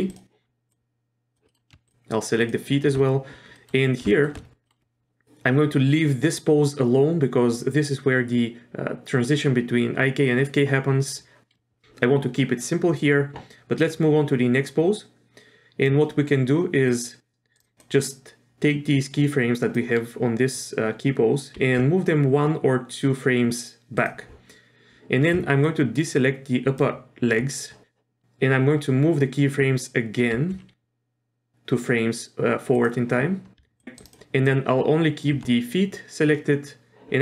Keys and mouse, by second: 0.1 click, 0.7-1.4 drag, 1.5 middle drag, 1.8 shift+click, 2.4 shift+click, 3.5 middle click, 4.1 shift+middle click, 4.6 middle click, 13.8-15.9 drag, 16.8-17.6 drag, 17.8-19.9 drag, 21.6 g, 25.8-26.8 ctrl+drag, 30.3 g, 33.8 ctrl+click, 34.6-35.2 ctrl+drag.